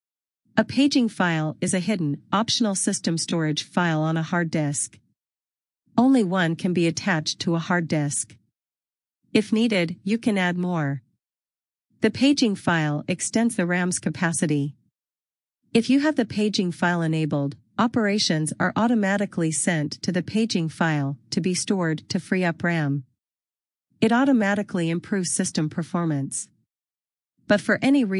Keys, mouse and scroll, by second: 6.9 click, 8.0-9.0 scroll.